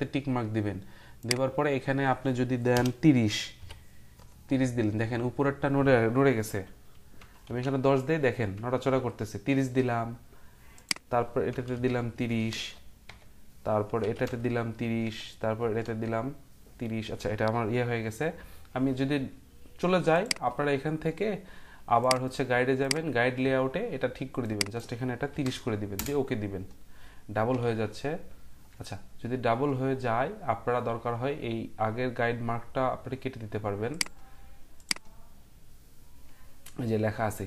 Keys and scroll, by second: 2.7 BackSpace, 3.6 BackSpace, 7.2 BackSpace, 8.5 BackSpace, 8.9 BackSpace, 11.6 BackSpace, 13.0 Tab, 13.8-14.7 typing, 15.0 Tab, 15.6 Return, 15.8 0, 17.9-18.6 typing, 25.3-25.9 typing, 25.9 Return, 27.6 ctrl+z, 31.9-32.6 typing.